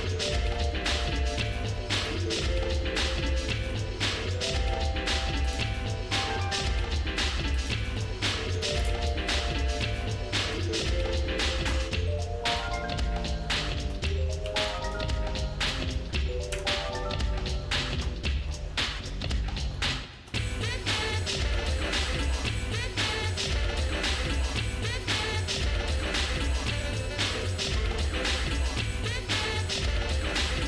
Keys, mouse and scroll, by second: 0.3 shift+middle click, 0.6 shift+middle click, 1.1 shift+middle click, 1.5 shift+middle click, 1.8 shift+middle click, 2.3 Tab, 3.3-4.4 scroll down 6, 5.5 click, 7.7-9.0 drag, 10.0 shift+middle click, 10.6 middle click, 11.0 scroll down 2, 11.5-12.5 shift+middle drag, 12.8 middle click, 13.2 scroll up 1, 13.2 scroll down 1, 14.5 ctrl+s, 15.1 shift+middle click, 16.5 KP_Divide, 17.5-18.0 scroll down 2, 18.1 middle click, 18.6 shift+middle click, 19.3 shift+middle click, 19.8 shift+middle click, 20.5 scroll up 2, 21.1 shift+middle click, 22.3 shift+middle click, 23.1 scroll down 1, 23.2-23.6 scroll down 1, 23.6 shift+middle click, 24.4 shift+middle click, 25.3 middle click, 26.0 scroll up 3, 26.6 scroll down 1, 27.1 shift+middle click, 28.2 middle click, 28.8 shift+middle click, 29.8-30.6 shift+middle drag.